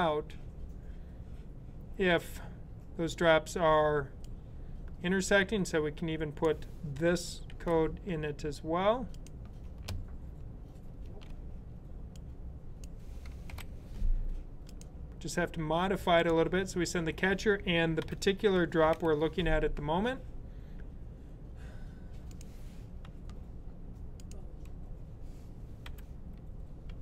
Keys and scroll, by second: 7.4 super+c, 10.9 super+v, 13.4 super+], 17.9-19.3 typing, 22.9 s, 25.5-27.0 typing.